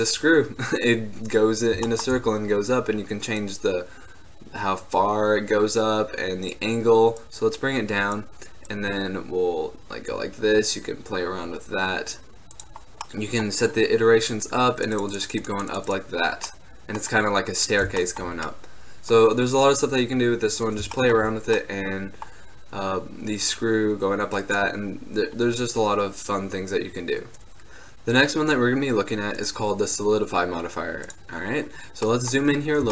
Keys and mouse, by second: 0.3-2.9 middle drag, 2.9-5.4 drag, 7.3-12.4 drag, 12.4-13.2 drag, 13.2-18.8 middle drag, 19.1-23.7 middle drag, 25.6-27.5 middle drag, 27.5-31.4 drag, 31.4-32.2 middle drag, 32.2-32.9 drag.